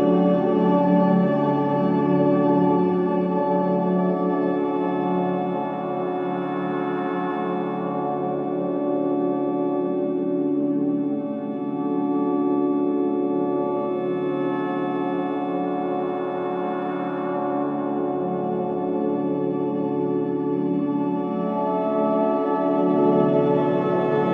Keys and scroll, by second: 0.4 3, 4.6 4, 9.1 ], 10.1 ], 12.4 F9, 14.5 ], 16.2 ], 19.7 4, 22.0 3, 22.3 2.